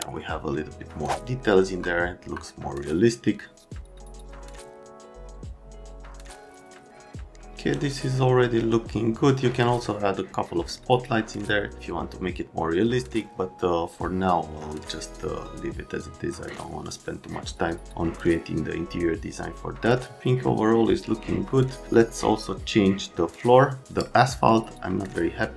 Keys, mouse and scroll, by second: 1.6 F3, 2.2 F3, 24.5 middle click.